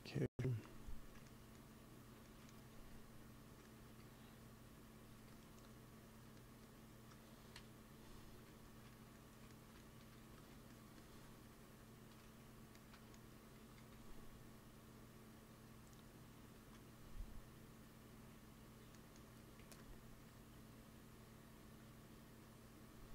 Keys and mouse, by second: 2.7 f, 3.7 f, 4.3-6.3 drag, 5.1 f, 7.4 KP_1, 9.9 x, 10.1 f, 10.6-12.8 drag, 13.5 g, 13.8 f, 14.5-16.3 drag, 16.4 ctrl+s, 19.5 f, 20.1 f, 20.6-23.1 drag.